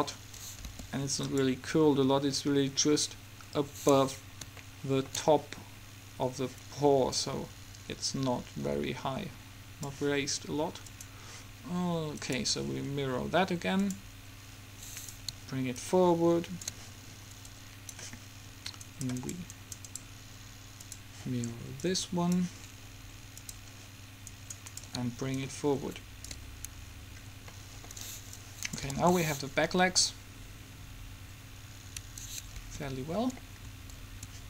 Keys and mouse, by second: 0.9 r, 4.8-6.6 middle drag, 7.4-9.3 drag, 10.9-15.6 drag, 15.2 right click, 17.0-18.9 drag, 19.2 middle click, 19.4-21.0 right drag, 21.0 middle click, 21.4-24.4 drag, 24.4 middle click, 27.0 click, 27.4 middle click, 28.4-30.2 drag, 29.1 alt+a, 32.1 Escape.